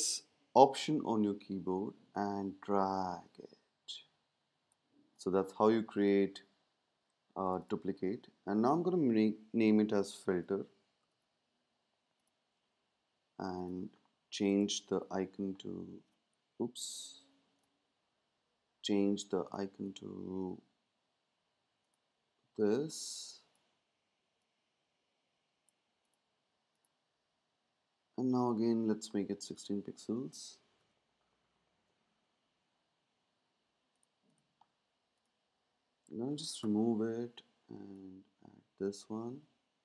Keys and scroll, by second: 9.8 typing, 11.0 typing, 20.5 super+v, 30.8 Tab, 31.4 shift+Down, 32.0 Up, 32.1 Up, 36.6 BackSpace.